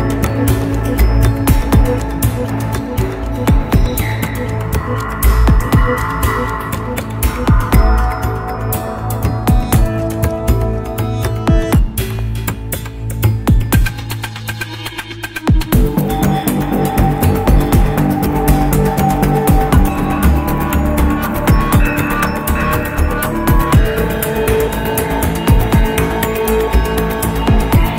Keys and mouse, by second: 1.8 click, 2.7-4.2 middle drag, 5.7 click, 17.5 click, 17.7-22.0 drag, 23.8 click.